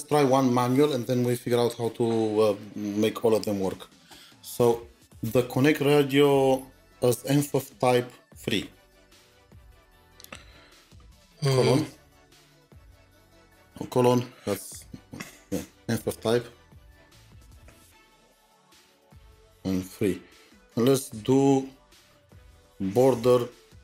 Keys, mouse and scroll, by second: 11.9 space, 12.5 BackSpace, 15.2-17.7 typing, 18.4 Tab, 19.6 typing, 22.2 typing, 22.9 Tab, 23.7-23.8 typing.